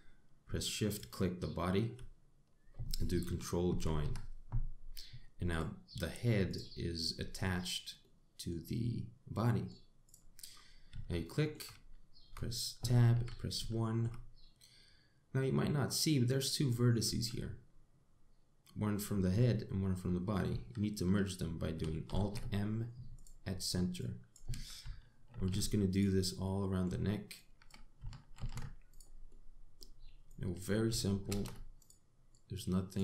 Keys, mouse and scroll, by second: 1.5 shift+click, 4.3 ctrl+j, 6.1 click, 7.1 click, 8.6 middle click, 10.1 middle click, 10.7 click, 11.1-11.5 scroll up 4, 11.8 shift+middle click, 12.4 scroll up 1, 12.9 Tab, 13.8 1, 14.4 shift+middle click, 14.9 scroll up 2, 16.7 click, 22.7 alt+m, 24.6 click, 25.9 alt+m, 27.1 middle click, 28.0 click, 29.0 alt+m, 29.9 middle click, 30.9 click, 31.9 alt+m, 32.9 click.